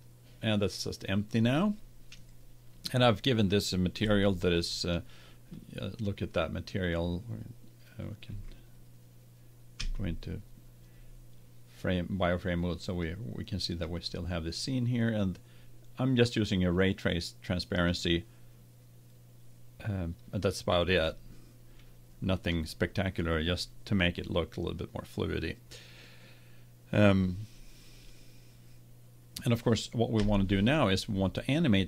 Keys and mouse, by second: 0.0-1.9 drag, 4.1-6.3 middle drag, 6.3-7.8 drag, 8.3 z, 9.8 z, 30.1 KP_1.